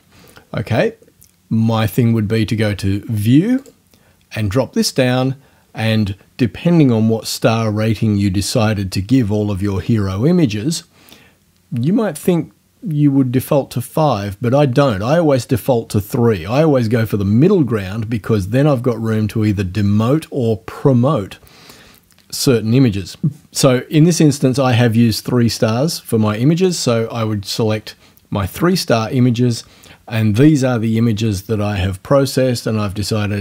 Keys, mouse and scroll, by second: 3.6 click, 26.7 click, 30.1-30.4 scroll up 2.